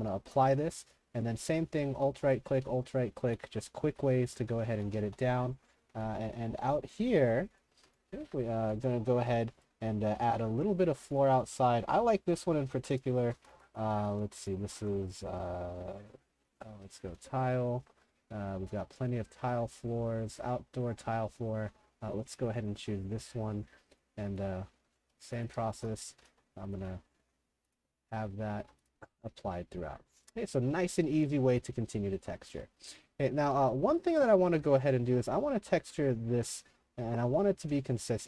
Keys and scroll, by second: 0.2 shift+t, 2.3-5.2 typing, 13.2-14.7 typing, 16.8-17.7 typing, 24.7-26.8 typing, 30.2-35.1 typing, 36.7-38.2 typing.